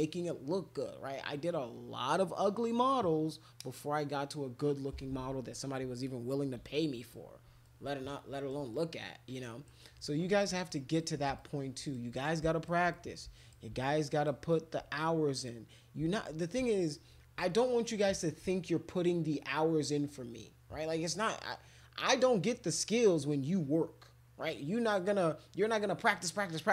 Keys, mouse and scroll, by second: 6.7 alt+click, 7.6 alt+click, 8.7 click, 10.0 click, 10.7 click, 11.3 alt+click, 11.8 alt+click, 12.1 click, 12.9 click, 13.8 alt+click, 14.5 alt+click.